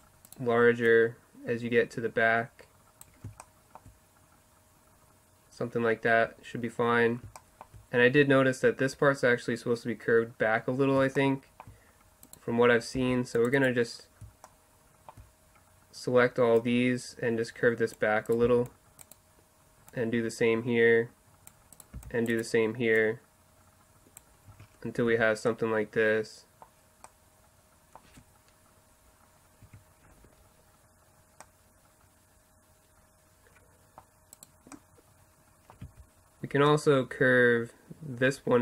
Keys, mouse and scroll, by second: 0.0-3.0 drag, 0.0-3.0 right drag, 3.4-7.5 middle drag, 11.5-13.9 middle drag, 13.0 c, 14.0 middle click, 14.8 middle click, 16.2 middle click, 16.8-18.3 drag, 18.5 c, 21.0 click, 22.0 c, 23.0-24.2 middle drag, 24.5 Tab, 25.1 z, 25.6 middle click, 26.0 middle click, 26.2 middle click, 29.7 Tab, 31.7 middle click, 32.5 middle drag, 33.5 middle click, 34.4-36.1 middle drag, 35.9 z.